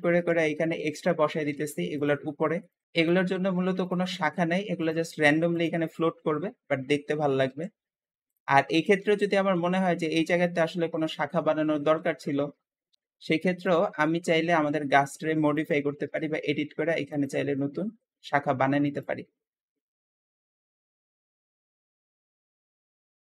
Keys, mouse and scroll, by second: 0.0 KP_1, 0.1 1, 1.0 shift+middle click, 1.4-4.9 typing, 6.1 KP_7, 6.2 7, 7.3 shift+d, 8.7 KP_1, 8.9 1, 9.2 g, 11.0 shift+middle click, 11.8 shift+d, 12.9 s, 13.0 g, 13.0 Tab, 13.5 click, 14.6 Tab, 15.4 click, 15.9 e, 17.8 e, 19.6 ctrl+a, 20.0 ctrl+click, 20.3 ctrl+a, 20.5 ctrl+middle click, 21.0 click, 21.2-23.4 typing, 21.4 click, 21.7 Tab, 21.9 Tab, 22.8 shift+middle click.